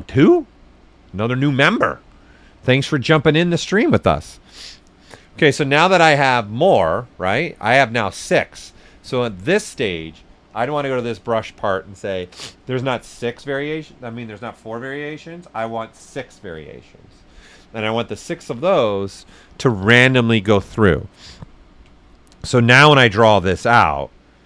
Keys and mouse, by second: 8.5 click, 11.3-14.3 drag, 14.6-18.0 drag, 21.8 click, 21.9 ctrl+right click, 22.6-23.5 typing, 22.9 click, 24.1-24.4 drag.